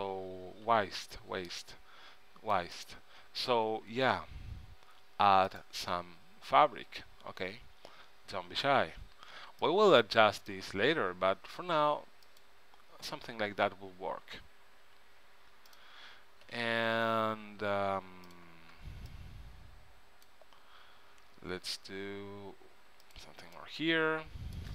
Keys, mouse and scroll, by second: 0.8 a, 1.4 c, 2.9-4.1 right drag, 3.3 s, 8.9 a, 9.4 c, 11.0 s, 14.9 s, 16.6 a, 17.4 v, 18.4-20.3 drag, 18.9 b, 21.3 s, 23.7-24.7 middle drag.